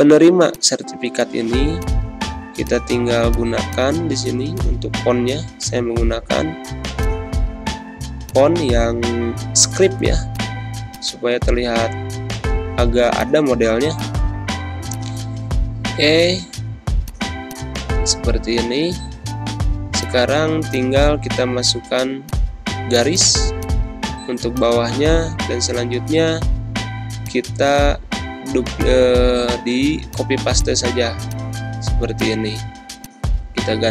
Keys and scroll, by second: 4.8-6.1 typing, 18.6 ctrl+Scroll_Lock, 28.3 ctrl+c, 31.5 ctrl+v, 32.3 ctrl+a, 33.7 ctrl+a.